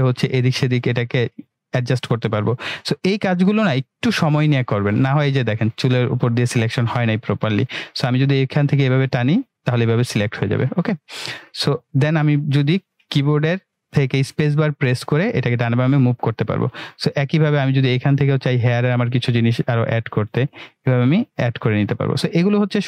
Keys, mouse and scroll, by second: 2.6-3.0 scroll up 1, 7.9-9.2 click, 11.1-12.1 right click, 12.1-13.1 middle click, 13.2 space, 18.6-19.5 click, 22.2-22.8 click.